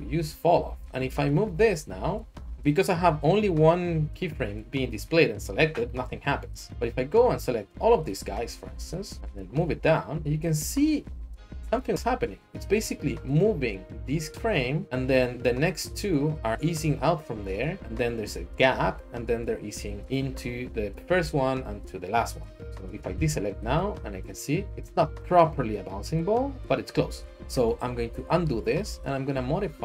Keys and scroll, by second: 6.3 ctrl+z, 23.1 a, 27.5 ctrl+z, 28.1 ctrl+z, 28.4 ctrl+z.